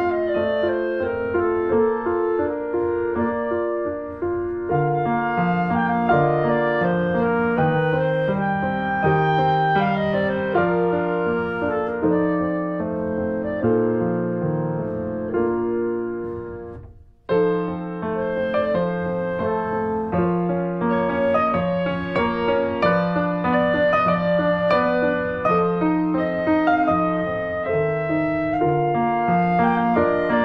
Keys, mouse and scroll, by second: 4.3 middle click, 4.9 ctrl+b, 10.7 click, 11.0 middle click, 11.3 ctrl+s, 11.5 click, 11.9 Tab, 12.4 Tab, 12.5 middle click, 13.0-14.0 scroll up 2, 14.0 click, 14.2 Tab, 14.5 click, 14.8 shift+middle click, 15.5 s, 16.8 middle click, 17.1 z, 26.8 middle click, 27.2 Tab, 27.5 scroll down 1, 27.7 middle click, 28.0 ctrl+s, 28.1 click, 28.3 shift+middle click, 28.6 Tab, 28.7 scroll up 1, 29.0 middle click, 29.5 ctrl+r.